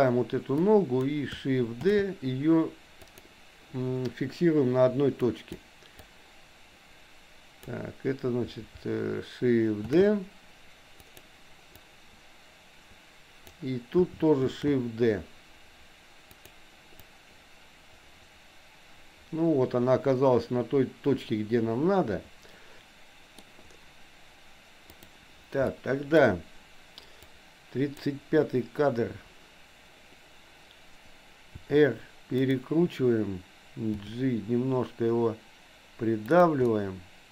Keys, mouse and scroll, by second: 0.6 click, 1.9 shift+d, 5.2 click, 6.0-7.7 drag, 9.9 shift+d, 11.9-13.5 drag, 14.5 shift+d, 17.1-22.8 drag, 22.8 middle click, 24.9 click, 25.7 middle click, 27.4 click, 31.6 r, 33.9 g, 36.6-37.3 middle drag.